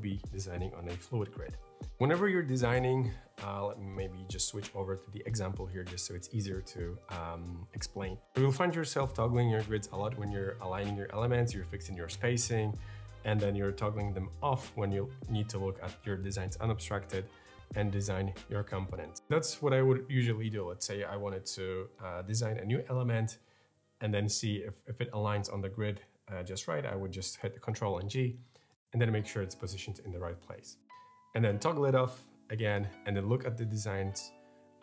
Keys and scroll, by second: 27.2 ctrl+g, 28.6 super+z, 31.2 ctrl+g.